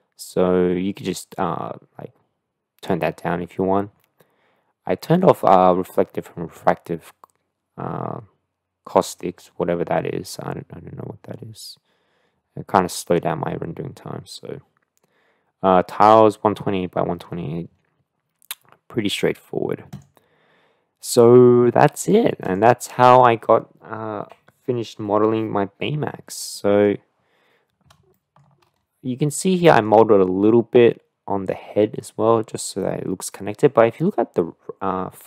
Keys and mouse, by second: 26.6 middle drag, 29.4 middle click, 29.7 click.